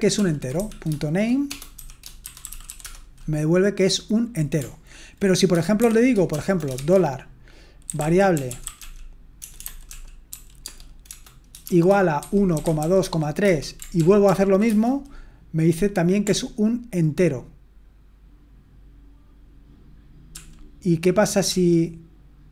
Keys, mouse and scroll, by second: 0.3-2.5 typing, 5.8-6.7 typing, 7.9-13.0 typing, 13.4 Return, 14.0 ctrl+p, 14.2 ctrl+p, 14.7 Return, 20.3 ctrl+p, 21.5 ctrl+p.